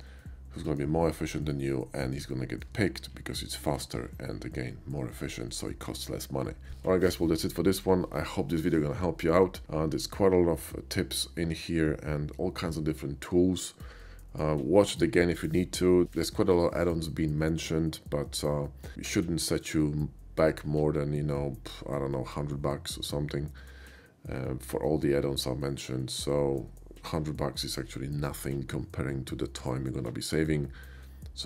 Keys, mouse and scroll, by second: 0.2 shift+middle click, 1.1 shift+middle click, 1.6 shift+middle click, 2.4 shift+middle click.